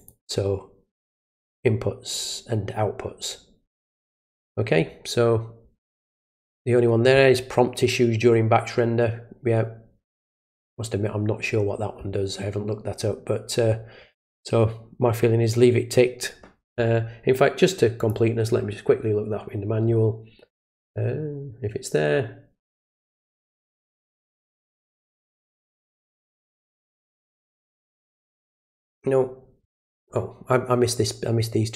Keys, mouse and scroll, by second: 0.0 click, 18.0 click, 18.6 scroll down 2, 22.1-22.5 scroll up 2, 24.3-26.9 scroll up 2, 26.9-27.5 scroll down 2, 27.5-31.7 scroll down 1.